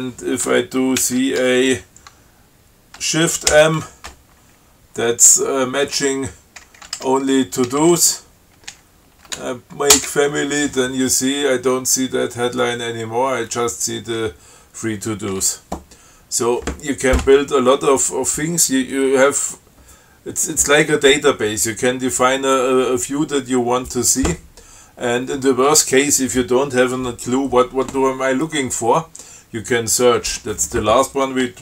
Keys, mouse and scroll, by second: 0.1 q, 1.3 ctrl+c, 1.7 ctrl+a, 3.8 shift+m, 7.3-9.0 typing, 10.2 Return, 15.6 q.